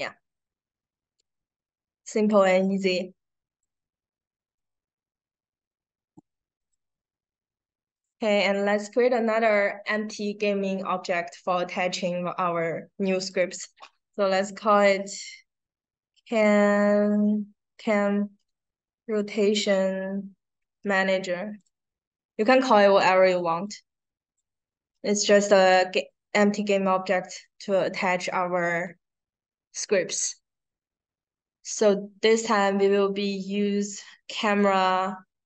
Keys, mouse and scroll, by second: 2.1 click, 3.4 click, 4.5-6.1 drag, 6.6 click, 7.8 right click, 13.1 click, 14.8-16.1 typing, 17.7-21.2 typing, 21.5 click, 22.3 click, 23.6-24.6 drag, 34.4 click.